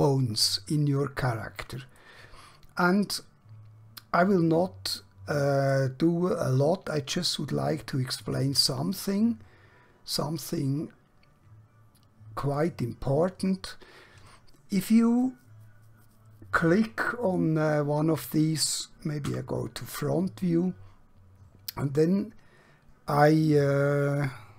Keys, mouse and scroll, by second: 2.0-5.7 middle click, 6.3 scroll down 1, 7.3-8.3 middle click, 8.6-8.9 scroll up 1, 10.1-10.6 scroll down 1, 10.6-12.5 scroll up 1, 12.5 click, 19.2 KP_1.